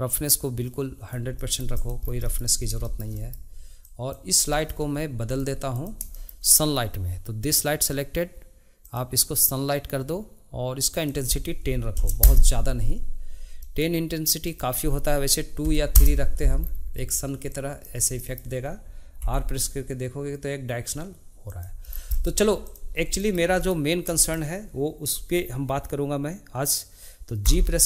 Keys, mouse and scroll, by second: 1.3 middle click, 1.7 click, 2.0 scroll down 1, 2.2-2.6 middle drag, 2.6 scroll up 3, 2.8 shift+middle drag, 3.0 shift+scroll down 1, 3.1-3.8 middle drag, 3.8 click, 4.5 shift+middle click, 5.2 drag, 5.7 click, 6.1-8.8 shift+middle drag, 8.8 click, 10.9-13.6 drag, 13.6 middle click, 14.5-16.6 drag, 16.6-16.9 scroll down 1, 16.9-17.5 middle drag, 17.5 click, 18.1-19.2 shift+middle drag, 19.2 r, 22.1-22.6 middle drag, 22.7 click, 22.9 scroll up 2, 23.1-27.2 shift+middle drag, 27.4 g.